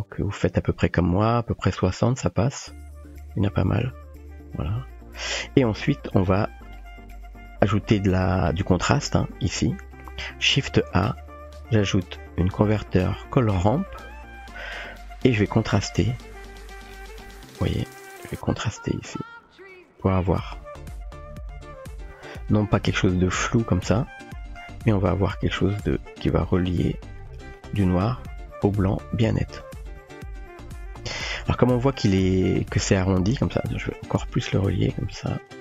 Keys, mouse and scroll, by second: 3.7-5.3 drag, 6.8 middle click, 7.7 click, 8.1 typing, 9.1-9.5 drag, 9.5 typing, 11.0 shift+a, 13.7-15.9 typing, 15.5-16.5 drag, 18.8-19.7 drag, 20.5-22.4 drag, 23.5 shift+middle click, 25.8-27.6 drag, 28.3-28.9 drag, 29.6-31.4 drag, 33.9 click.